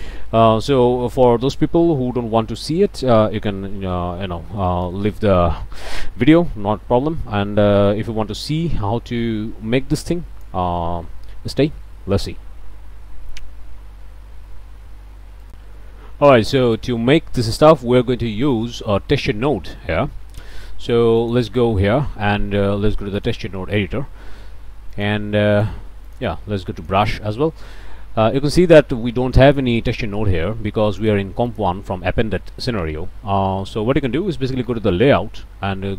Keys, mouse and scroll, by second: 2.6 click, 4.2 scroll up 1, 4.6 click, 5.4 click, 10.1 click, 15.5 click, 16.8 click, 18.2 ctrl+s, 20.4 scroll down 2, 21.2 click, 23.2 click, 24.9 click, 25.5 click, 26.0 click, 26.8 click, 31.0 click, 31.5 click, 34.6 click.